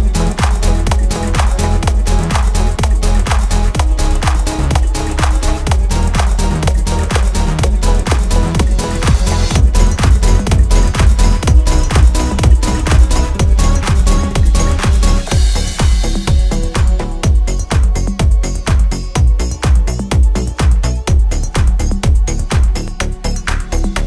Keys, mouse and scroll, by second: 1.1 click, 9.9 space, 13.8 space, 15.3 click, 18.3-18.8 alt+scroll up 1, 20.3-23.1 drag.